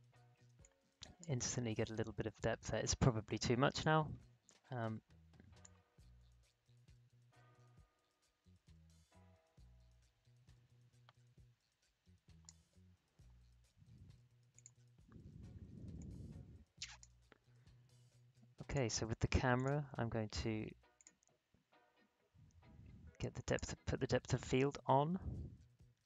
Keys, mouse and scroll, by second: 0.4 space, 0.6 click, 0.9 space, 1.4-1.9 alt+scroll up 1, 2.2-2.7 alt+scroll down 1, 3.7-14.5 drag, 15.2 alt+scroll down 1, 15.7 space, 15.9 click, 16.3 space, 18.6 click, 21.6 scroll down 1, 23.4 click.